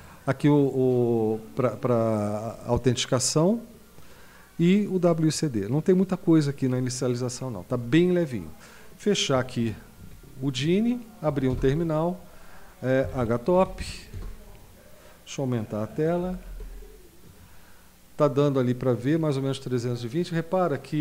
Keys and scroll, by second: 10.0 super+q, 11.5 super+Return, 12.8-14.1 typing, 14.1 Return, 16.2 ctrl++, 16.5 ctrl++.